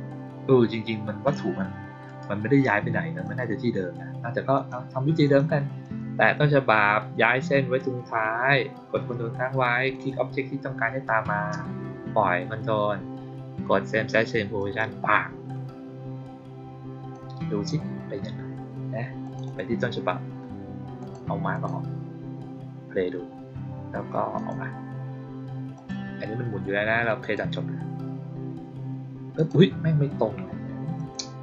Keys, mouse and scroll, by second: 2.0 right click, 3.1 click, 4.4 click, 5.1 click, 5.7 click, 9.8 ctrl+click, 14.5 click, 17.0-17.6 drag, 19.1 click, 19.3 click, 20.9 click, 21.4 click, 24.3 click, 25.6 click, 27.1 click, 29.3 click, 30.9 click.